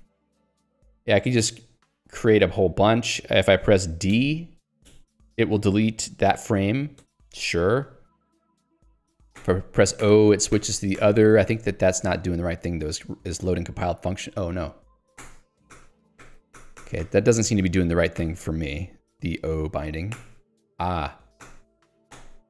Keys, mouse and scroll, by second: 0.4 [, 1.0 ], 4.0-4.9 typing, 7.1 d, 9.4 o.